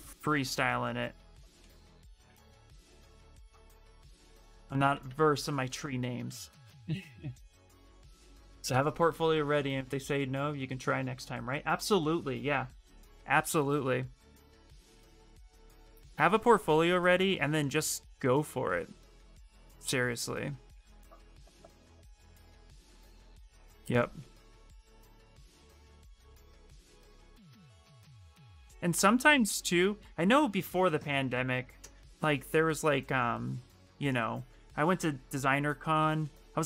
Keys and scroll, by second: 3.4 alt+Tab, 3.9 alt+Tab, 4.4 alt+Tab, 4.5 alt+Tab, 5.1 alt+Tab, 5.4 alt+Tab.